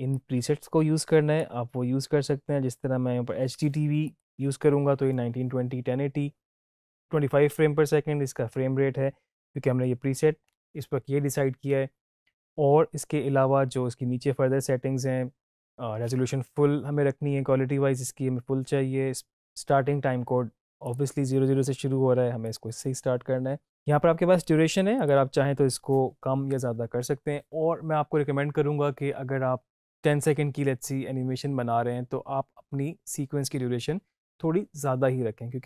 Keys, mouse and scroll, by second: 20.8 click, 24.9 click.